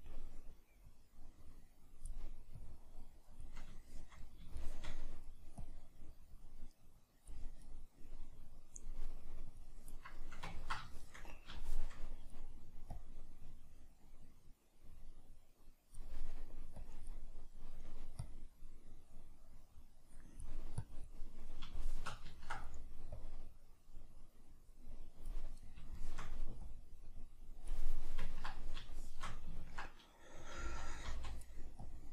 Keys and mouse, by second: 0.1-0.9 middle drag, 0.9-3.8 drag, 3.8-5.6 shift+middle drag, 5.6-7.7 drag, 7.7-8.4 middle drag, 8.4-10.0 drag, 10.0-13.0 middle drag, 13.0-16.2 drag, 16.2-16.8 middle drag, 16.8-17.6 drag, 17.6-18.2 middle drag, 18.2-21.4 drag, 21.4-23.2 middle drag, 23.2-25.6 drag, 25.6-26.6 middle drag, 26.6-28.3 drag, 28.3-31.8 ctrl+middle drag, 30.5 z, 31.8-32.1 drag.